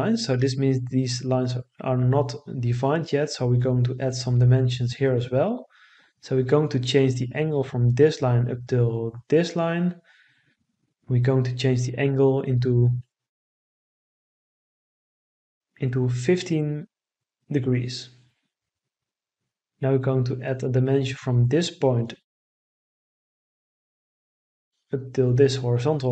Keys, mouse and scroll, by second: 16.1 1, 16.7 5, 17.4 Return.